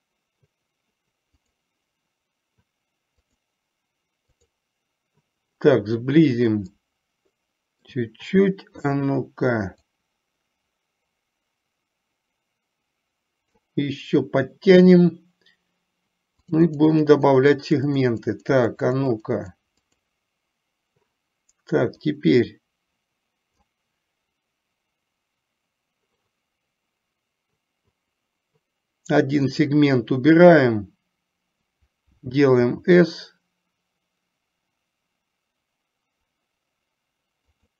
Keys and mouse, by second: 3.3 click, 4.4 click, 6.8-8.0 middle drag, 8.9 KP_3, 10.1-13.8 drag, 16.8 click, 17.5 click, 17.8 click, 18.5-19.8 drag, 19.9 click, 22.3-23.9 drag, 29.6 click, 32.8 s.